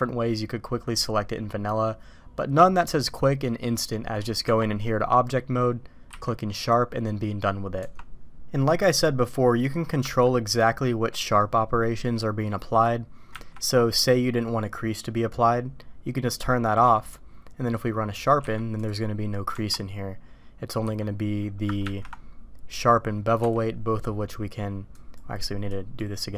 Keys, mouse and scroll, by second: 4.4 Tab, 4.8 middle drag, 6.0 q, 7.8 Tab, 8.5 middle drag, 10.0 Tab, 11.1 middle click, 13.3 ctrl+`, 18.1 middle click, 18.4 q, 19.5 Tab, 20.8 a, 21.8 ctrl+`, 25.0 click, 25.6 click.